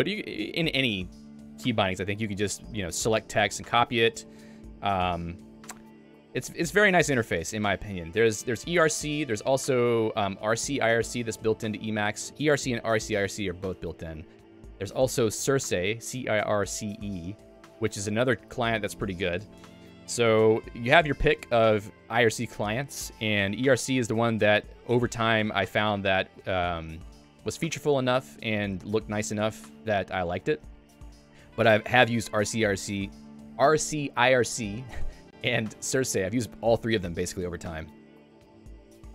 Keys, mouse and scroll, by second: 2.1 j, 3.7 Escape, 4.2 j, 4.9 a.